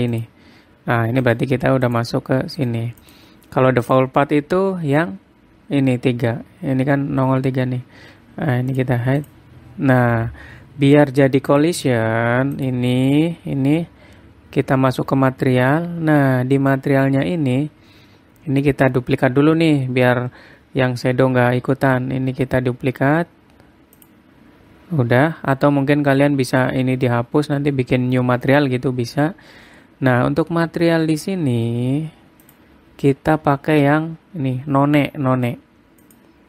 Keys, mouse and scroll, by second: 0.7 click, 1.8 click, 2.4 click, 3.1 click, 3.6 click, 4.4 click, 9.3 click, 9.8 click, 11.5 click, 12.1 click, 13.1 click, 14.8-15.5 scroll down 3, 15.5 click, 16.1-16.9 scroll down 2, 16.9-17.5 scroll down 5, 17.5-18.0 scroll up 4, 18.2-20.5 scroll up 14, 24.5 click, 25.9 scroll down 1, 26.3-27.7 scroll up 3, 29.6-31.2 scroll down 15, 31.2-31.7 scroll down 1, 31.7-33.0 scroll down 1, 33.0 click, 33.0 scroll down 1.